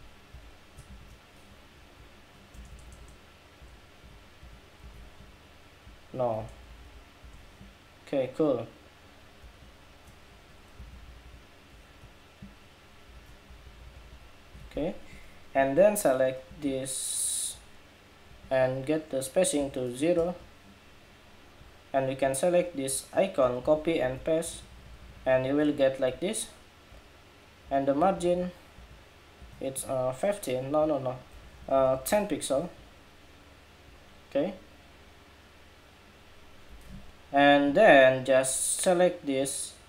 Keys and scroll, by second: 2.3 shift+Tab, 2.4 shift+Tab, 2.6 alt+Left, 3.3 alt+Left, 3.7 alt+Right, 4.1 alt+Right, 4.6 alt+Right, 5.9 alt+Right, 6.1 alt+Left, 6.3 alt+Left, 6.4 alt+Left, 7.0 alt+Left, 7.8 alt+Left, 10.5 alt+Up, 10.6 alt+Up, 10.8 alt+Up, 11.0 alt+Up, 12.3 alt+Up, 23.3 super+c, 23.8 super+v, 24.8 super+v, 27.7 alt+Right, 27.9 alt+Right, 28.1 alt+Right, 28.5 alt+Right, 29.1 alt+Right, 30.1 alt+Right, 31.1 alt+Left, 31.4 alt+Left, 31.5 alt+Left, 31.7 alt+Left, 31.8 alt+Left, 32.8 alt+Left.